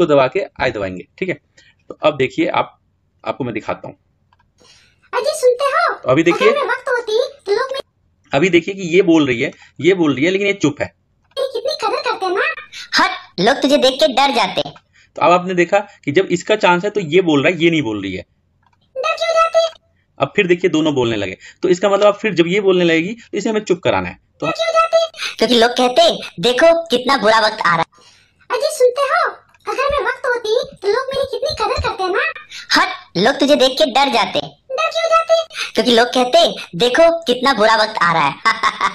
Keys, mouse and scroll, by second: 2.7 i, 3.7 click, 7.7-10.5 drag, 11.2-18.2 drag, 18.6-28.4 drag.